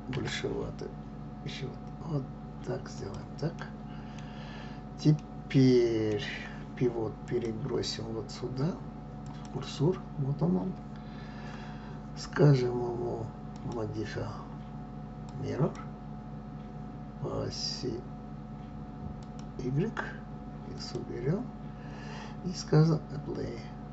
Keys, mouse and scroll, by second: 0.3 s, 3.7-9.4 middle drag, 9.4-23.9 drag.